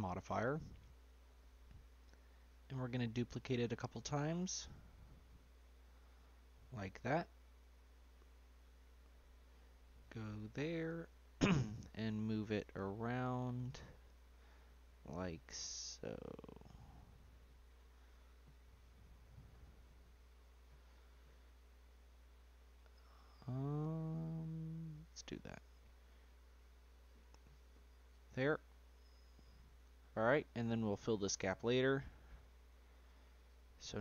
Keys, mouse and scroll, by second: 0.3-2.4 middle drag, 2.4-3.3 scroll up 1, 3.3-5.3 drag, 5.3 scroll down 1, 5.6-8.4 middle drag, 8.4 click, 9.0 scroll down 1, 9.3-9.7 scroll up 2, 9.7-11.1 shift+middle drag, 11.1 g, 13.5 middle click, 14.1-14.5 scroll down 1, 14.5-17.6 shift+middle drag, 17.6 scroll down 1, 17.7-20.9 middle drag, 21.5-22.6 scroll down 4, 22.6-23.7 scroll up 1, 23.7-24.8 scroll up 3, 24.8-28.5 drag, 28.5 scroll down 1, 28.6-30.3 middle drag, 30.3-31.3 scroll up 4, 31.3-31.6 middle drag, 31.6-32.0 scroll down 2, 32.0-34.0 middle drag.